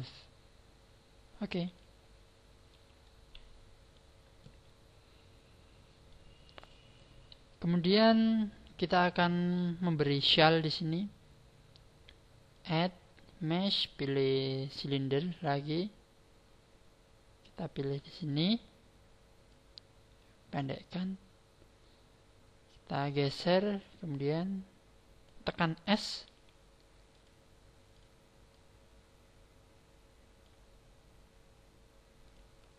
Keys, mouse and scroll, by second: 0.5-1.1 scroll up 8, 1.2 scroll down 8, 1.7 middle click, 2.7 a, 3.0 middle click, 4.4 middle click, 9.4 KP_1, 12.5 click, 18.2 click, 19.5 click, 22.9 click, 23.8 click, 26.2 s, 27.2 click, 27.9 click, 28.5 click, 32.2 click.